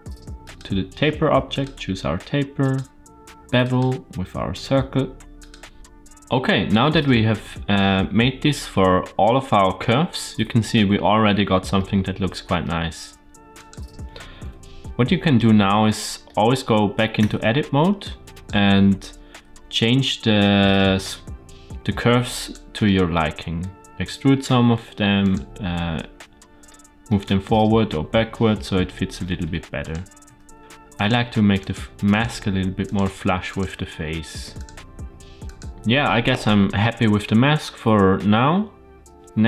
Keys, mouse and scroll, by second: 0.3-1.5 drag, 2.5 click, 3.5-5.4 drag, 11.7-12.5 middle drag, 13.5 click, 14.3 KP_Decimal, 15.3-16.4 middle drag, 17.1 Tab, 17.9 click, 19.4 g, 22.8 middle click, 24.0-24.3 drag, 24.4 g, 25.6-26.7 middle drag, 27.0-28.9 middle drag, 29.3 Tab, 29.7 click, 30.6 g, 30.9 click, 31.0 g, 32.0 click, 32.2 g, 33.4 click, 33.6 g, 35.4 click.